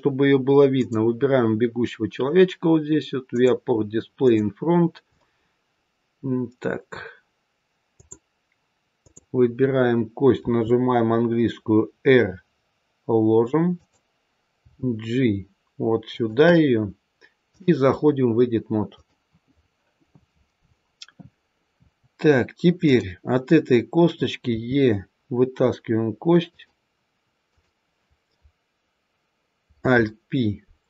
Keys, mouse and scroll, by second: 0.7 click, 3.2 click, 4.1 click, 7.8 click, 8.9 click, 10.3 r, 14.5 g, 17.4 click, 22.7 click, 24.4 e, 27.3 click, 29.7 alt+p.